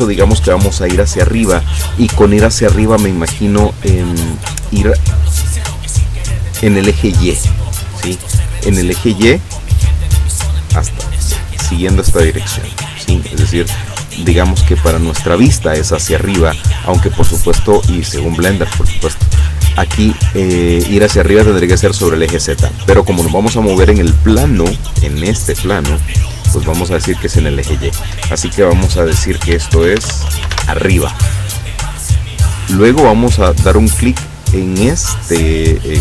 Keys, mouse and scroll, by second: 29.8 shift+a, 30.1 shift+r, 30.4 shift+i, 30.5 shift+b, 33.3 click.